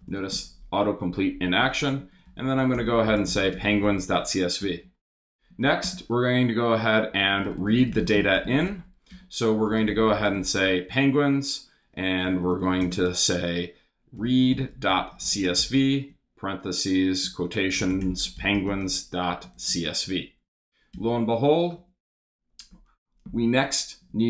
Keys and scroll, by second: 0.1 space, 1.8-4.3 typing, 4.6 Return, 5.5 shift+Return, 5.6 shift+3, 5.8 shift+space, 6.8-10.9 typing, 12.2 shift+,, 12.6 shift+-, 12.8 space, 13.9-20.2 typing, 20.9 Return, 21.8 Up, 22.4 Up, 23.7 super+s.